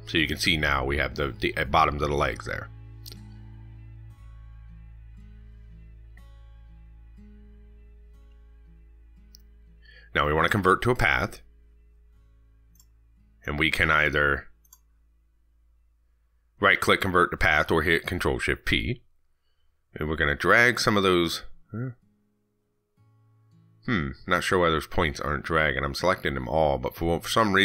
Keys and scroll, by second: 15.2 ctrl+z, 18.3 ctrl+z, 22.1 ctrl+z.